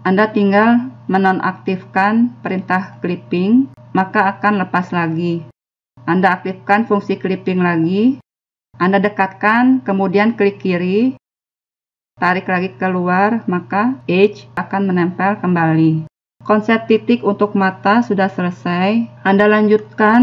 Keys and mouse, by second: 1.0 click, 1.7 click, 7.8-10.7 drag, 12.3 click, 13.5 click.